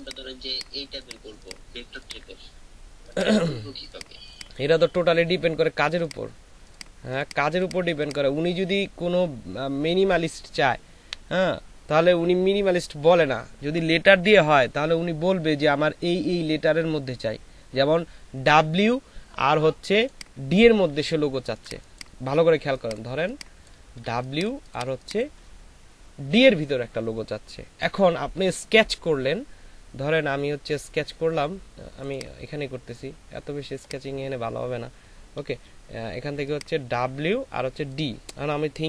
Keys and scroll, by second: 21.4 ctrl+alt+space, 22.5 space, 23.1 c, 24.0 ctrl+c, 35.4 ], 35.5 ].